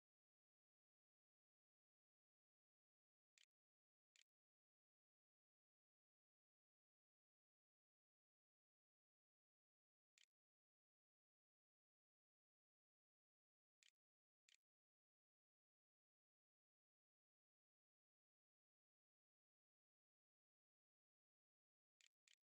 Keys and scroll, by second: 0.0-1.1 typing, 2.2-5.1 typing, 5.2 Tab, 8.8-10.0 typing, 12.6 Delete, 13.0 Return, 13.2-15.6 typing, 14.0 Return, 20.7-21.9 typing, 22.1 Delete.